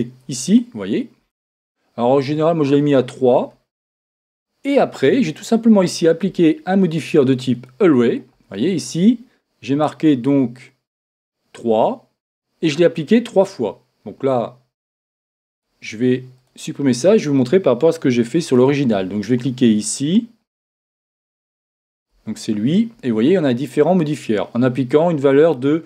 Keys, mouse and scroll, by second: 2.8-4.6 drag, 5.9-7.6 drag, 11.0-12.8 drag, 12.9 click, 13.5-15.5 middle drag, 13.5-15.0 scroll up 1, 15.0-15.4 scroll up 1, 15.5-18.2 drag, 17.9-20.9 middle drag, 18.1 x, 20.9-22.3 right drag, 21.5 Tab, 22.1 Tab, 24.5-25.8 middle drag, 25.3-25.8 scroll up 1.